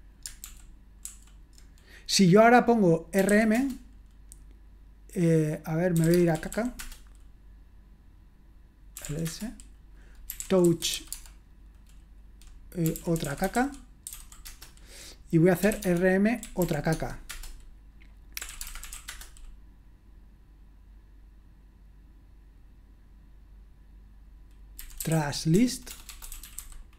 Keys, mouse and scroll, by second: 0.4 super+l, 1.1 super+l, 2.9-3.8 typing, 5.7-7.0 typing, 8.8-11.4 typing, 12.6-19.4 typing, 24.5-26.9 typing.